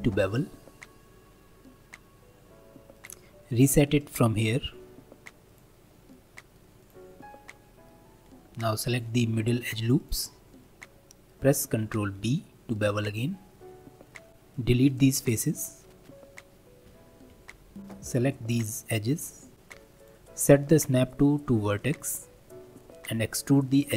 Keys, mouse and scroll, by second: 4.0-6.1 drag, 6.1 middle click, 6.8 click, 7.2-8.3 middle drag, 8.3 2, 8.9 alt+click, 10.0 alt+shift+click, 10.6-12.2 middle drag, 12.2 ctrl+b, 14.3 3, 14.5-15.8 drag, 16.8 x, 18.1 shift+click, 18.4-19.6 middle drag, 20.0-22.5 drag, 22.5-23.9 middle drag.